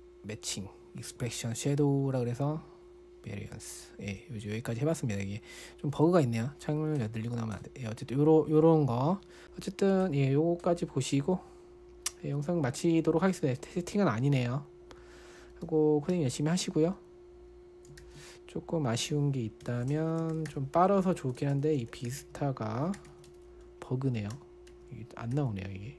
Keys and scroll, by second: 9.1-9.9 typing, 16.0-16.5 typing, 18.4 ctrl+l, 20.0 super+], 20.1-25.9 typing.